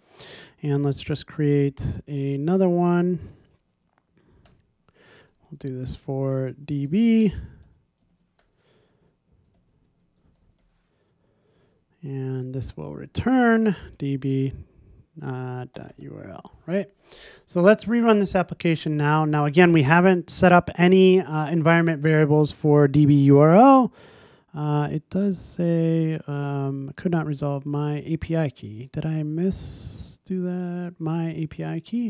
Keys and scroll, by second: 3.6 super+c, 5.1 super+v, 14.4 Return, 16.7 super+s, 18.1 ctrl+r.